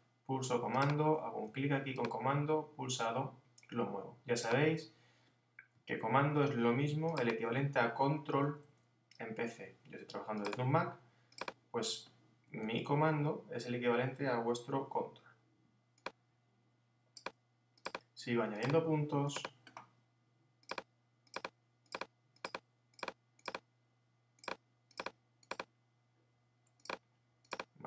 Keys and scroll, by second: 12.6 super+z.